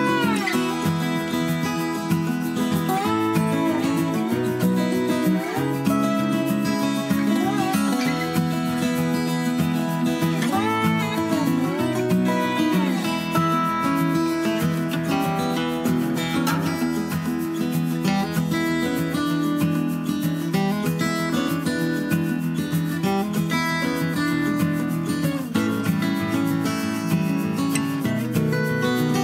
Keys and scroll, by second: 12.6 f, 13.0 d, 20.2 3, 20.3 Return.